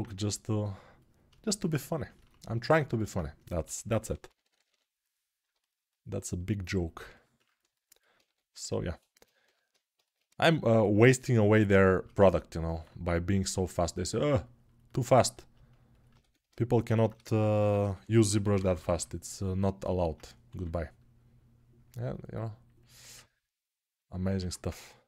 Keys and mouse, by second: 3.4 g, 8.0 2, 9.2 g, 16.0 1, 20.3 2.